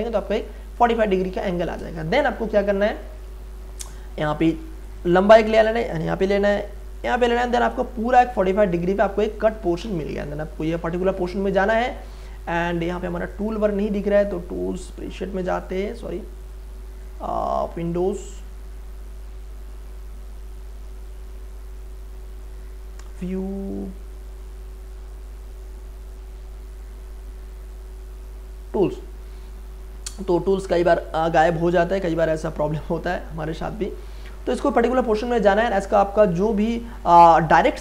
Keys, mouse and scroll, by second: 2.0 space, 2.2-4.8 ctrl+drag, 7.4 space, 7.6-9.9 ctrl+drag, 9.8 a, 13.3 click, 28.7-36.1 drag, 36.2-37.8 drag.